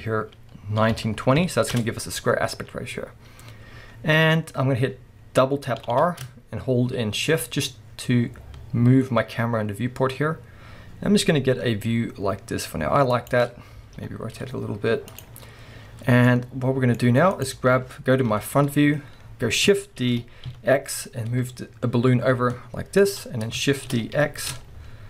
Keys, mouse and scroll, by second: 1.8 Return, 2.5-5.4 scroll down 1, 5.4-5.8 scroll up 1, 5.8 r, 7.7-10.1 drag, 13.3 shift+click, 14.0 r, 15.2 click, 15.4-16.3 scroll down 1, 16.3-17.4 middle drag, 17.4 click, 18.3 KP_1, 18.9 scroll up 1, 20.1 shift+d, 23.1 shift+click, 23.2-23.6 scroll down 1, 24.0 shift+d.